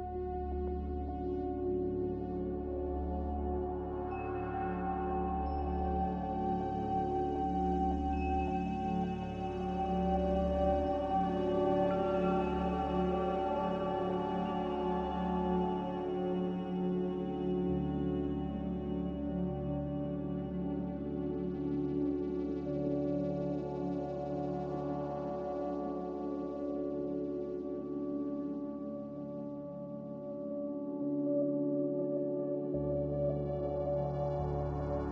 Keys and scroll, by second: 11.8 r, 17.5 a, 29.0 Escape, 29.2 Escape, 29.4 Escape, 29.7 g, 32.8 typing, 33.0 Return.